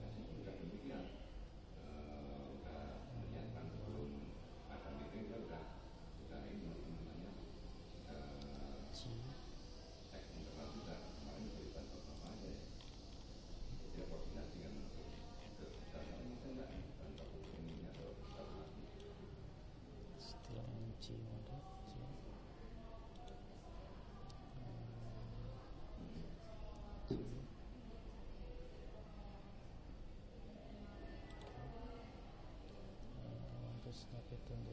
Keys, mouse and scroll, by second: 1.3 g, 9.5 g, 12.9-16.0 middle drag, 16.7-17.8 middle drag, 18.0-19.0 middle drag, 19.4 middle click, 21.6 g, 27.0 g.